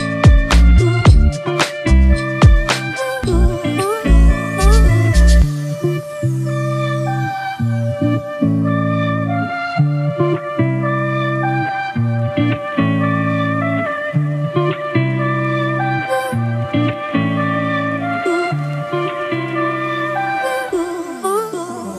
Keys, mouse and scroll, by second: 0.3 typing, 6.7 double click, 8.9-9.7 typing.